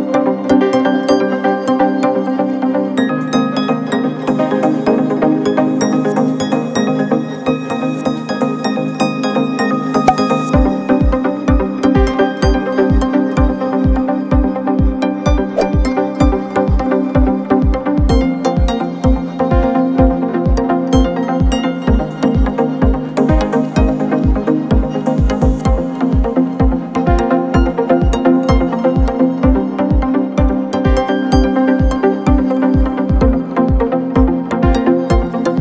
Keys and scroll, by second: 10.1 r, 16.6 F4, 24.2 F9, 26.0 z, 27.0 space, 33.2 F9.